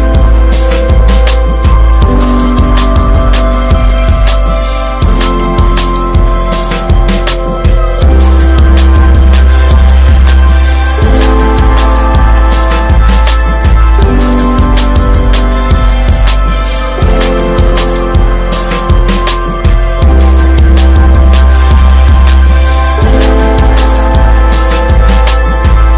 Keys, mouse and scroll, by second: 1.0 Tab, 1.2 middle click, 1.3 scroll up 1, 1.5 Tab, 1.8 alt+z, 2.3 click, 2.9 shift+middle click, 3.1 scroll up 2, 3.5 alt+middle click, 3.8 alt+middle click, 5.1 e, 9.0 Tab, 10.3 Tab, 10.5 middle click, 10.8-11.2 scroll up 1, 11.2 s, 12.2 Tab, 12.9 click, 13.0 right click, 13.7 Tab, 14.0 middle click, 14.2 scroll up 1, 14.9 click, 15.8 2, 15.8 click, 16.3 alt+click, 16.7 alt+middle click, 17.3 shift+middle click, 18.0 b, 23.8 click.